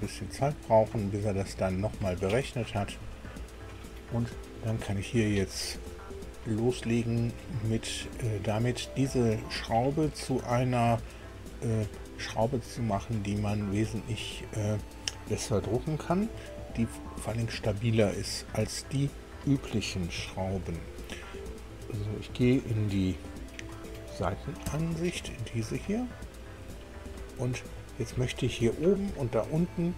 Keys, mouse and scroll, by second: 14.2 middle click, 17.9 KP_1, 20.1 KP_2, 24.6 KP_1, 25.8 middle click, 26.7 shift+middle click, 27.6 shift+click, 27.8 middle click.